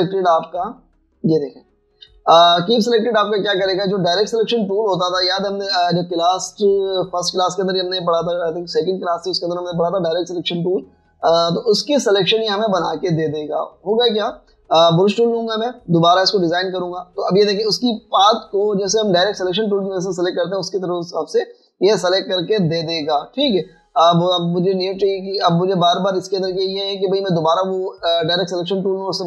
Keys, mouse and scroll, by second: 1.5 typing, 3.1 typing, 4.8 typing, 6.1 right click, 13.6 typing, 16.0 typing, 25.1 typing, 26.5 typing.